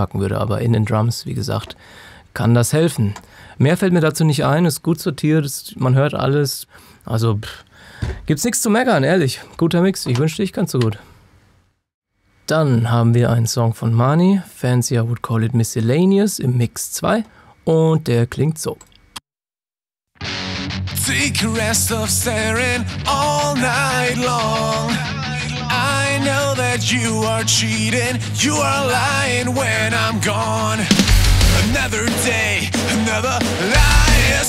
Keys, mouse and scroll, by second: 0.9 click, 10.2 ctrl+Num_Lock, 10.5-11.3 ctrl+scroll down 2, 18.7 click, 19.1 space, 22.0 F3.